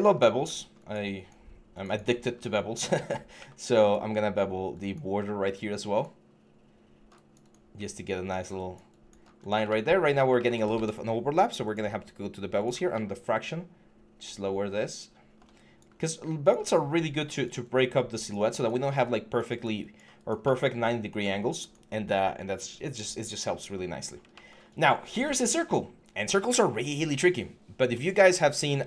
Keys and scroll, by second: 10.5 ctrl+a.